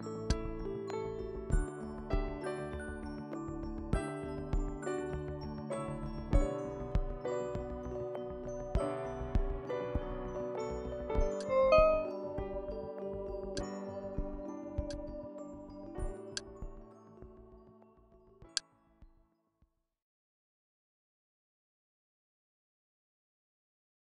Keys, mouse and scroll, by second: 0.3-2.2 drag, 2.0 Delete, 6.4 KP_5, 11.4 click, 13.4 click, 15.1-17.6 drag, 18.6 click, 20.4-24.1 drag.